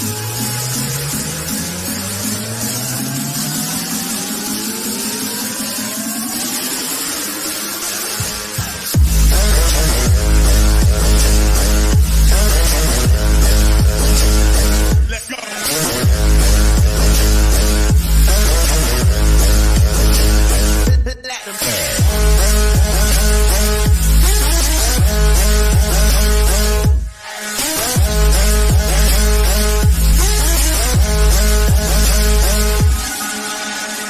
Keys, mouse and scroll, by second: 0.7 click, 5.5 click, 9.5 click, 11.6 scroll up 1, 13.1-15.9 middle drag, 18.1 click, 18.1 typing, 22.3 click, 22.3 typing, 27.3 click, 27.3 typing, 28.5 scroll down 1, 29.6-31.0 middle drag, 31.0 scroll down 1, 31.9-33.2 middle drag, 33.2 scroll up 1.